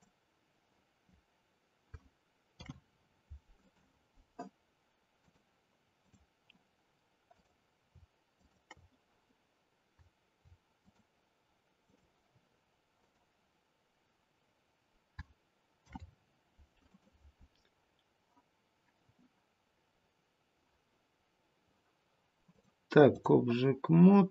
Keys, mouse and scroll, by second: 2.4 ctrl+p, 5.1 click, 7.3 click, 8.3 shift+click, 8.6 shift+click, 10.7 click, 13.0 click, 15.7 ctrl+p, 22.4 click.